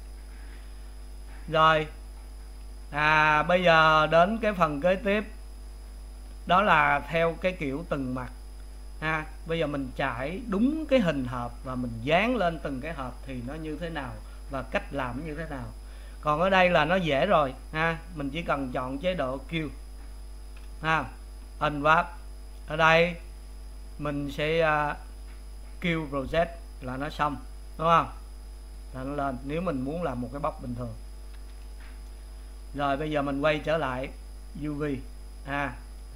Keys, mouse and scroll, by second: 3.9-31.3 middle drag, 31.3 click, 34.9 click.